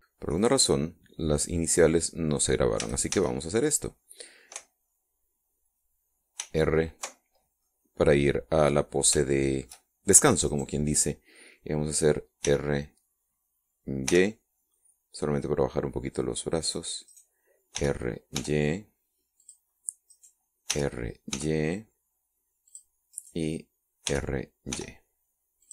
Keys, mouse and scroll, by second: 1.4 click, 3.8 a, 7.4 alt+r, 8.7-10.3 middle drag, 10.3 shift+middle click, 11.6 right click, 13.5 r, 15.1 y, 17.7 click, 18.2 right click, 18.8 r, 20.5 click, 21.2 right click, 21.7 r, 23.7 click, 24.2 right click, 25.1 r.